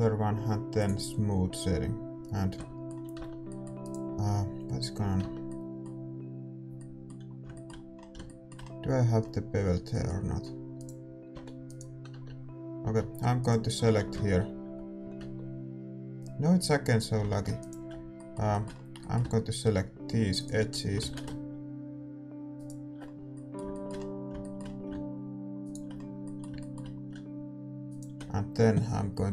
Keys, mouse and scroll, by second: 2.0 click, 2.5-4.3 middle drag, 2.5 a, 4.3 Tab, 4.4-6.3 middle drag, 4.4-6.3 right drag, 6.3 Tab, 10.8-13.2 right drag, 11.3 g, 13.2 Tab, 14.4 Tab, 14.5-16.4 right drag, 14.5 a, 16.4 Tab, 17.2 a, 17.6-24.4 right drag, 20.3-22.1 middle drag, 22.1 ctrl+z, 23.0-29.3 middle drag, 25.6-29.3 right drag.